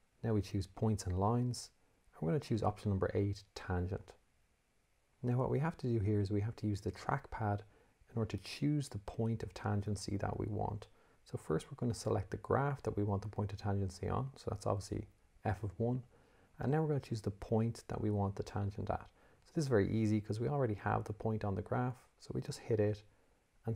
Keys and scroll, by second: 1.3 1, 4.5 8.